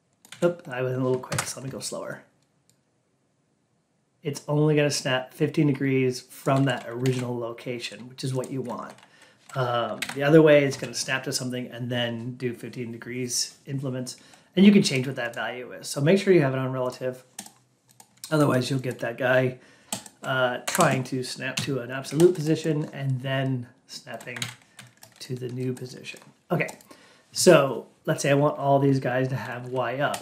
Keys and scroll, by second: 6.9 ctrl+q, 10.0 alt+p, 20.5 F8, 21.4 Delete, 24.3 ctrl+a.